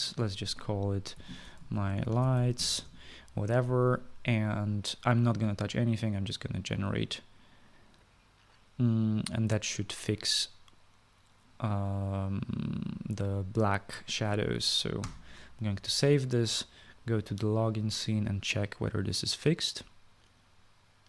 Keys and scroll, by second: 1.6-3.8 typing, 15.7 ctrl+s.